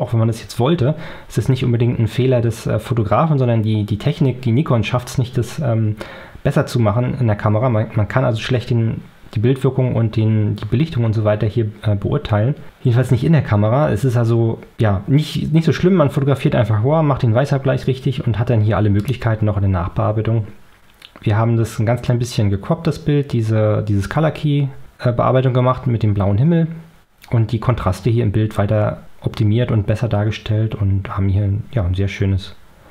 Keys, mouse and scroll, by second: 19.5 middle click, 19.5 scroll.